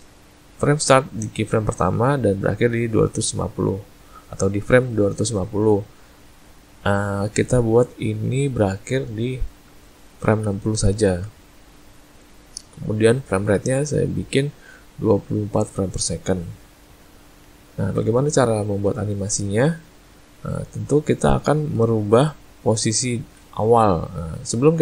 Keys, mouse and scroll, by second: 8.4 click, 22.1 click.